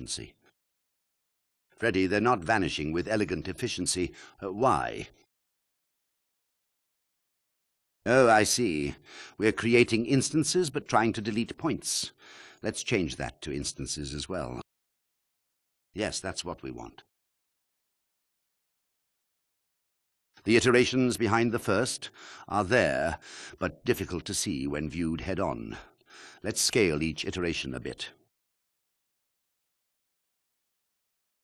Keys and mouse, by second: 3.3 space, 5.9 shift+click, 10.4-11.7 drag, 12.1 alt+shift+click, 13.2 click, 13.9 drag, 14.9 click, 18.4 click, 18.9 shift+click, 20.0 KP_1, 24.8-31.3 drag.